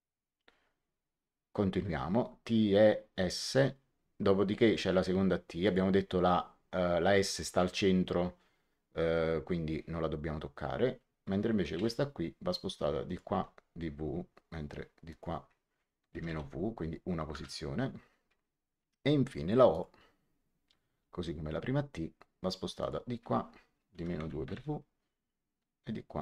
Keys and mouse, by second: 5.6 click, 11.7 m, 13.0 click, 13.2 w, 15.0 click, 16.0 KP_Subtract, 16.2 w, 17.2 Return, 17.2 KP_Enter, 19.6 click, 20.9 m, 22.7 click, 23.9 KP_Subtract, 24.1 KP_2, 24.3 KP_Multiply, 24.4 w.